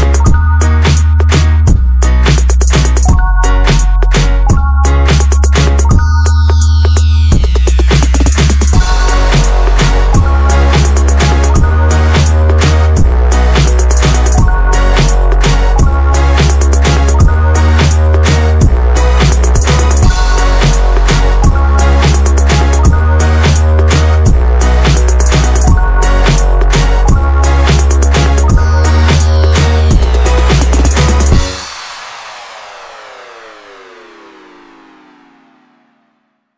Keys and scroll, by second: 0.7 Escape, 0.7 space, 2.6 Escape, 3.2-4.0 typing, 4.6 Escape, 5.6 typing, 6.8 Escape, 7.7 Escape, 8.2 e, 8.4 space, 17.9 e, 18.0 space, 18.6 e, 18.7 space, 20.6 Escape, 20.8 Escape, 21.4 Escape, 21.4 e, 22.1 space, 28.4 typing, 29.7 space, 31.1-32.3 typing, 32.5 Escape, 35.3 Escape, 35.9 Escape, 36.2-36.5 typing.